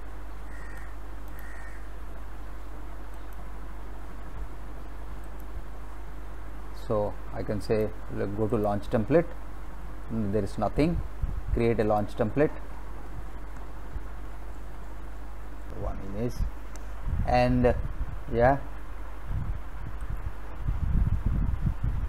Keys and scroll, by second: 15.7 ctrl+v.